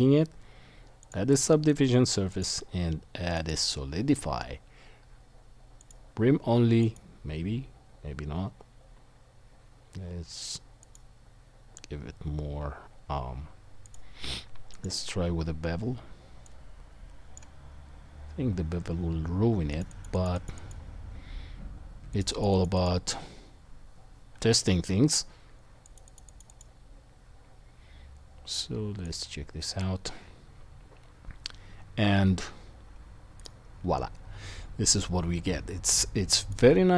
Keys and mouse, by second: 5.9 click, 7.1-10.8 drag, 17.3-19.7 drag, 26.6-29.2 drag, 29.2-33.4 middle drag, 33.4 click, 33.5-36.5 middle drag.